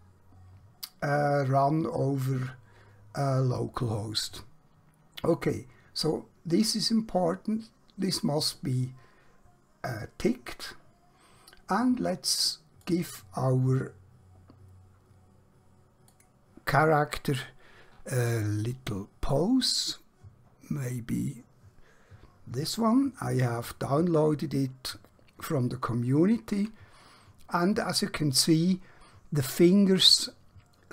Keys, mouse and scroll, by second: 12.7 click, 22.9-23.3 scroll down 1, 23.7-24.9 scroll up 1, 24.9-25.7 scroll down 1, 27.2-28.5 scroll up 1.